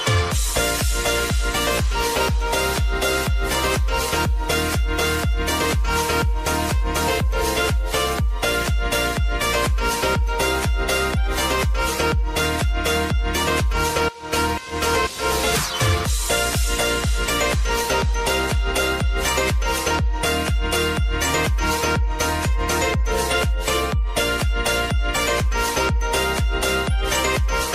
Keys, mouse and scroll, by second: 6.5 ctrl+alt+Home, 8.2-10.0 drag, 14.1 ctrl+alt+Home, 15.5 click, 21.9 s, 22.6 click, 24.2 Return, 25.2 click, 25.6 space.